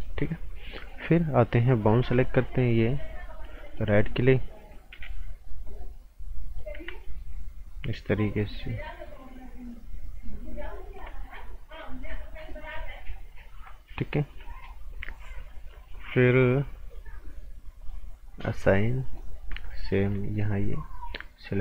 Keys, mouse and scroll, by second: 2.0 b, 2.7 click, 3.6 alt+right click, 4.9 g, 5.6 click, 7.0 ctrl+click, 11.8 ctrl+shift+click, 17.8 click, 19.0 right click, 19.4 scroll up 1, 19.5 right click, 20.3 alt+right click, 21.5 click.